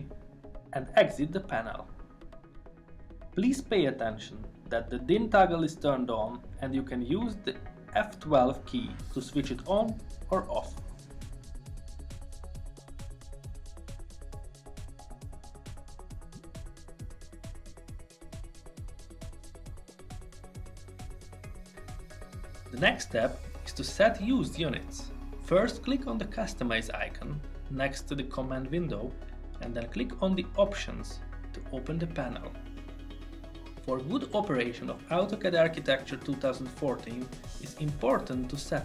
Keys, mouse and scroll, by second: 1.4 F12, 32.3 click.